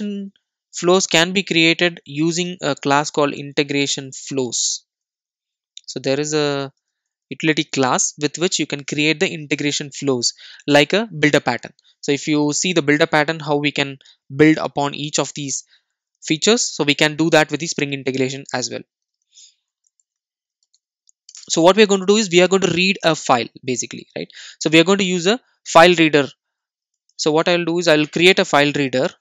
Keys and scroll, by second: 21.3 Return.